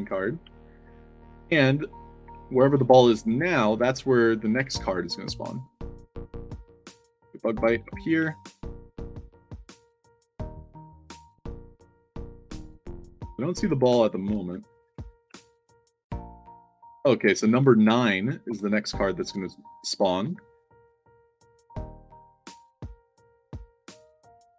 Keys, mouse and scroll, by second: 0.1-0.8 typing, 2.3-3.0 typing, 4.1-6.8 typing, 6.5 middle click, 7.8 middle click, 8.1 a, 9.4 w, 11.2 z, 12.3-15.3 typing, 17.1-18.9 typing, 20.1 e, 21.8 e, 22.7 e.